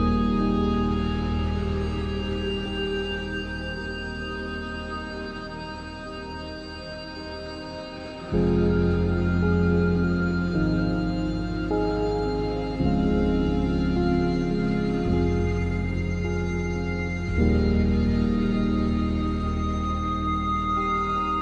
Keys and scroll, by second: 4.0 ctrl+d.